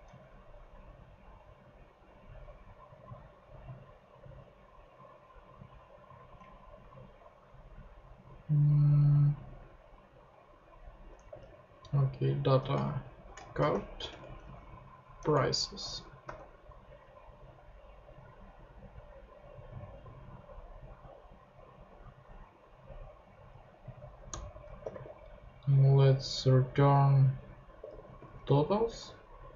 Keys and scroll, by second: 6.9 ctrl+Tab, 7.7 ctrl+super+Tab, 11.4 ctrl+Tab, 13.1 shift+Right, 13.1-14.8 typing, 15.2 Return, 15.8 super+Return, 15.9 super+Right, 16.2 super+;, 17.1 ;, 24.3 ctrl+Return, 24.6-25.4 typing, 27.5-28.9 typing.